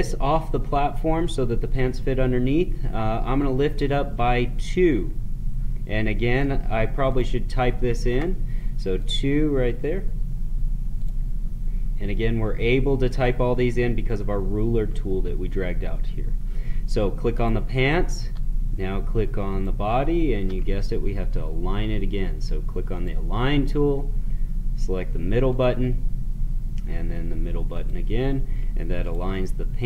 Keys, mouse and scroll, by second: 3.5-7.0 drag, 17.3 click, 19.4 shift+click, 22.9 click, 25.5 click.